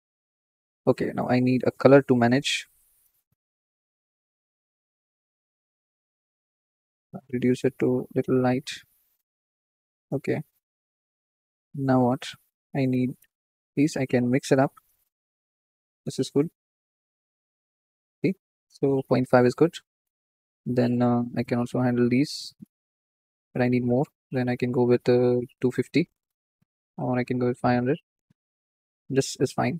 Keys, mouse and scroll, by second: 2.9 click, 5.5 scroll up 4, 6.6 click, 7.3 click, 12.1 click, 12.4-15.3 drag, 15.3-16.3 scroll up 2, 16.3-18.4 drag, 19.2-20.7 drag, 20.7-21.2 middle drag, 21.2-25.8 drag, 27.0-28.2 drag, 28.2 KP_0, 29.2-29.7 middle drag.